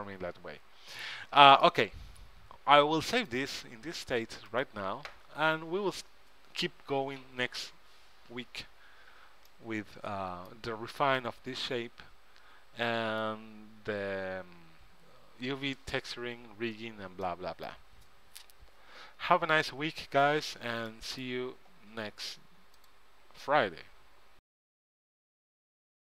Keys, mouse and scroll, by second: 3.3-5.2 drag, 9.6-13.1 middle drag, 13.2 middle click, 17.4-19.5 middle drag, 21.0-22.8 middle drag.